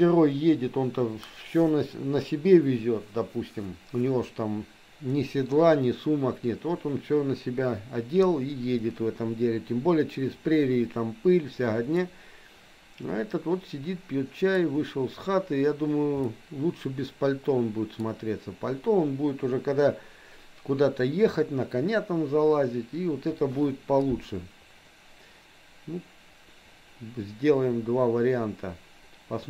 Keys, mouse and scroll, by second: 12.1-14.6 middle drag, 16.3-17.9 middle drag.